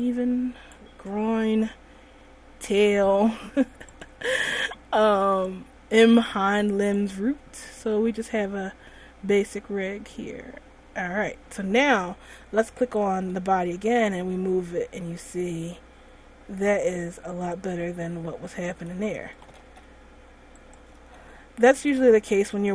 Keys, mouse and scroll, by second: 0.2 click, 2.9 click, 4.1 click, 5.6 click, 7.9-8.5 scroll down 2, 8.5-9.3 scroll up 6, 10.8-11.5 scroll down 6, 13.2 right click, 14.1 r, 17.9 right click, 18.1 r, 19.3 a, 19.6 a, 19.8 alt+r, 20.9 right click, 21.3 r.